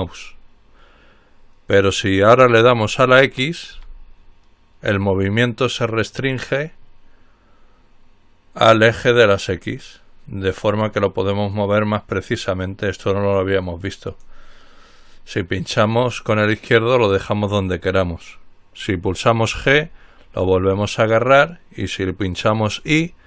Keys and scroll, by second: 3.9 x, 19.8 g.